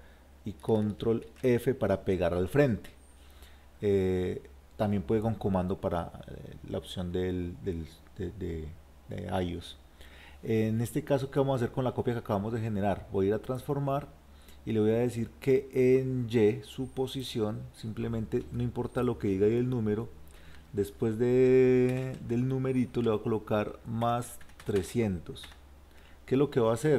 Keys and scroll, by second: 1.3 ctrl+f.